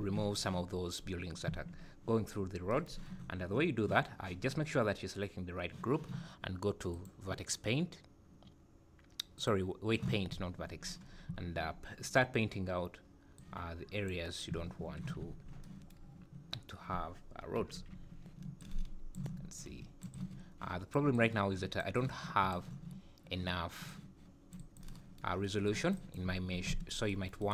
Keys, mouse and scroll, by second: 0.4 scroll up 3, 6.9 click, 11.1 scroll up 4, 13.4 click, 15.2 click, 17.6 ], 17.8 ], 18.6 click, 19.6 click, 20.2 click, 21.2 click, 22.0 click, 23.9 click, 24.6 click, 25.7 click, 26.0 click, 26.3 Tab, 26.7 a, 27.4 right click.